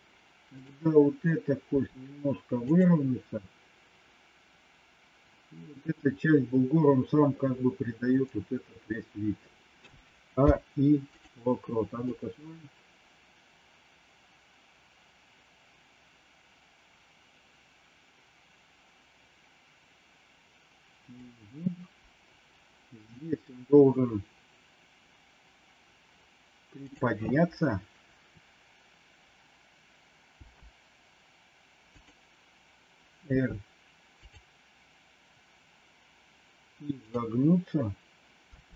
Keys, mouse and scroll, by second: 0.6 click, 1.7 r, 9.6 a, 10.3 i, 12.0-21.2 drag, 26.9 click, 30.3 g, 33.3 r, 36.9 click, 38.4 r.